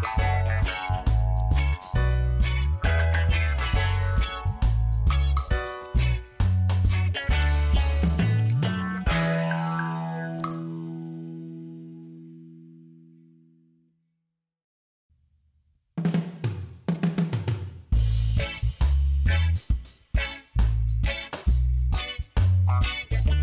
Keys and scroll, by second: 5.7 space, 20.3 ctrl+d, 21.0 space.